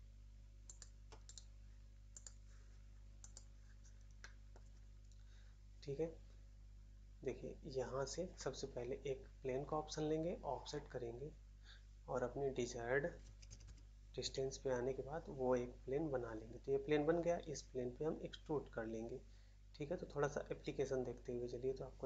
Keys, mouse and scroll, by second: 0.6 shift+click, 1.2 right click, 1.3 right click, 2.0 click, 2.2 click, 3.1 click, 3.2 click, 3.3 click, 3.7-4.1 scroll up 1, 4.1 middle click, 4.4 middle click, 13.6 typing, 14.2 Return.